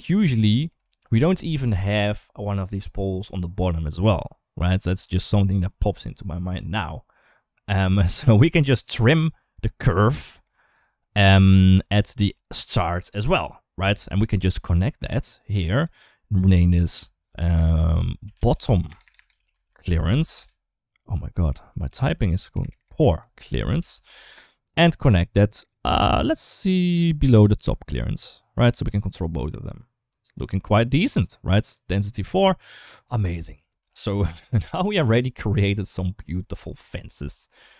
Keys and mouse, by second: 0.3 middle click, 0.6 shift+middle click, 8.1-8.5 middle drag, 9.5 middle click, 10.1 middle click, 13.8 click, 14.9-15.6 drag, 16.4 click, 16.7-20.2 shift+drag, 18.8 BackSpace, 18.9 BackSpace, 21.7-23.9 drag, 22.4 BackSpace, 22.6 BackSpace, 22.9 BackSpace, 25.0 click, 28.8-30.7 drag, 32.9 click, 33.6 ctrl+shift+s, 33.7 shift+middle click.